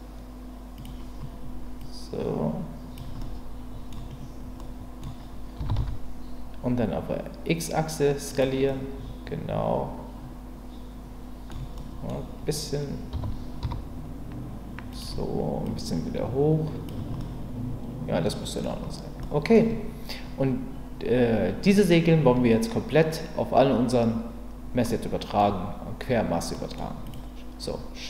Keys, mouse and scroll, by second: 0.7 click, 1.9 click, 3.2-3.7 scroll up 1, 3.7-5.0 middle drag, 3.9 scroll down 1, 5.6 s, 5.8 x, 8.3 click, 8.7-11.5 middle drag, 11.8 middle click, 13.1 s, 13.6 z, 14.9 click, 15.7 click, 17.2-18.6 middle drag, 19.2-19.5 scroll up 1, 24.8-25.4 scroll up 1, 26.5 scroll up 1.